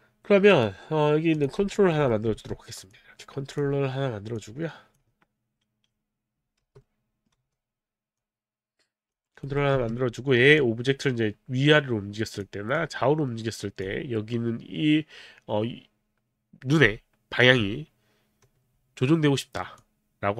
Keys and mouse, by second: 0.5 click, 1.8 alt+right click, 2.1 alt+middle click, 2.3 w, 2.9 click, 4.4 click, 6.6 r, 6.8 middle click, 7.4 e, 7.7 e, 8.2 click, 9.5 alt+middle click, 9.5 alt+right click, 9.8 alt+middle click, 9.8 w, 10.6 click, 12.7 click, 19.8 alt+click.